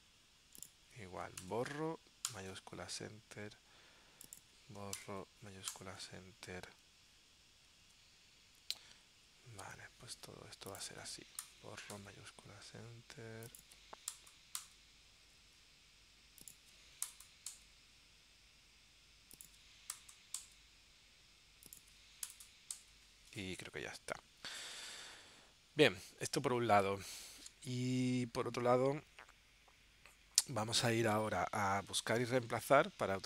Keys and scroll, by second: 2.5 shift+Return, 5.9 shift+Return, 8.0 super+Tab, 9.3 super+Tab, 12.1 shift+Return, 14.7 shift+Return, 17.7 shift+Return, 20.6 shift+Return, 22.9 shift+Return.